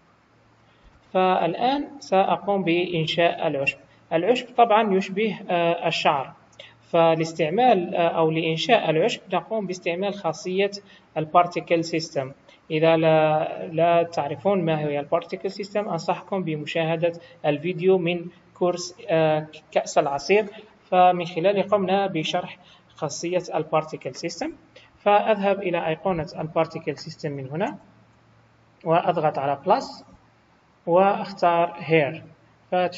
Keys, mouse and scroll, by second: 0.8 KP_1, 2.4 scroll up 4, 3.3 scroll down 2, 3.9 middle click, 6.4 click, 26.4 click, 29.6 click, 31.9 click, 32.5 scroll down 2.